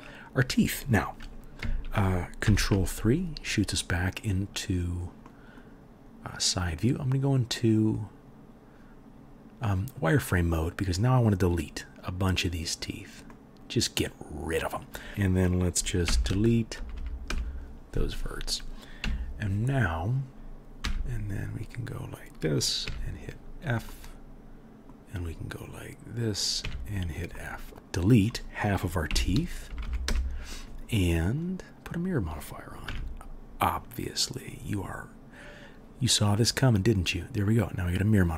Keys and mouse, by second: 2.4 ctrl+KP_3, 6.5 middle click, 6.5 right click, 10.9-20.3 middle drag, 14.0-14.3 drag, 14.0-14.3 right drag, 14.4 click, 14.4 right click, 15.1-19.4 drag, 15.1-19.4 right drag, 16.0 Delete, 16.9 Up, 19.0 KP_1, 20.3-21.5 drag, 20.8 2, 21.5 middle click, 21.6-28.2 drag, 22.8 f, 26.6 f, 27.7 middle click, 27.7-28.2 right drag, 29.0 Delete, 29.8 Up, 29.8-30.8 middle drag, 32.9 Tab.